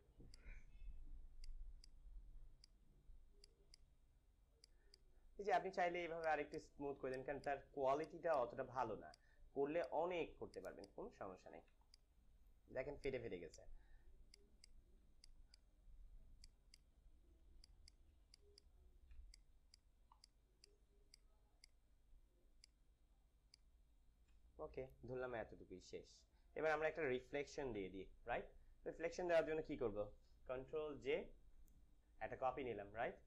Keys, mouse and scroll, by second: 0.2 alt+click, 4.5 click, 4.7 alt+click, 5.2-6.2 drag, 8.2 click, 10.1 alt+click, 11.0 click, 11.6 space, 12.2 space, 12.9-17.6 alt+drag, 17.6-19.1 alt+drag, 19.1-21.6 typing, 19.2 click, 19.7 click, 20.1 click, 20.9 click, 21.4 click, 24.8 -, 27.4 ctrl+d, 30.1 ctrl+d, 31.2 j.